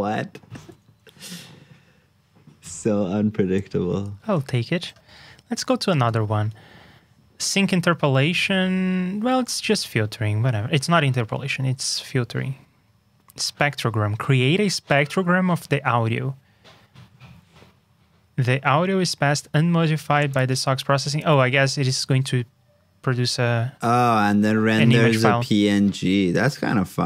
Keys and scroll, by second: 5.4 alt+shift+Down, 5.9 super+Tab.